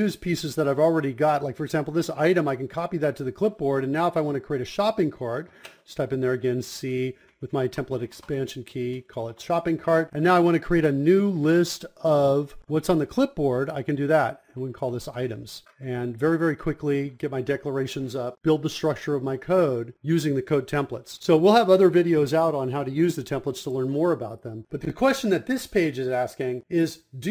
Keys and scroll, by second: 24.8-26.1 typing, 26.2 Insert, 26.5 Return.